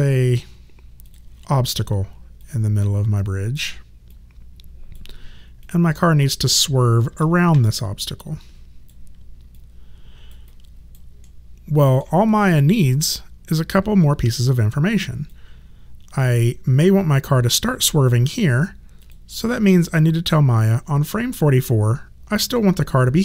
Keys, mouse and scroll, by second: 7.1 r, 7.8 click, 9.6 alt+click, 10.5 alt+right click, 11.2 alt+middle click, 12.3 alt+right click, 13.1 alt+middle click, 15.3 click, 19.0 click.